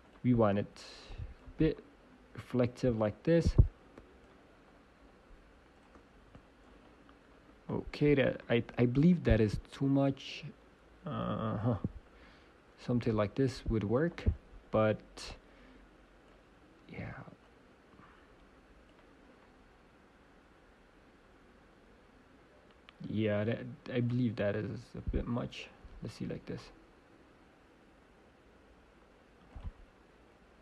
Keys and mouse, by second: 3.1-8.3 drag, 10.0-11.2 drag, 15.3-17.3 drag, 17.4-19.4 drag, 24.7-26.4 drag, 29.5-30.6 drag.